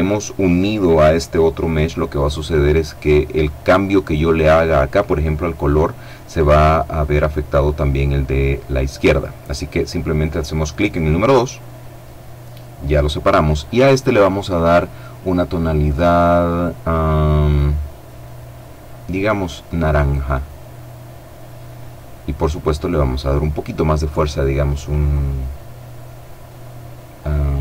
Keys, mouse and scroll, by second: 10.5 click, 13.0 click, 18.6 click, 22.4 click.